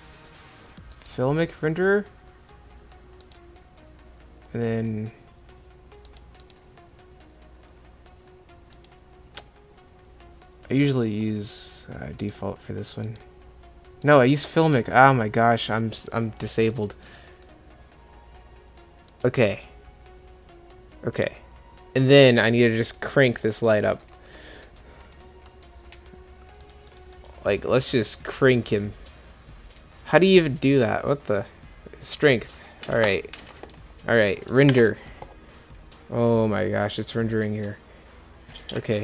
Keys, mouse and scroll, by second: 34.7 F12.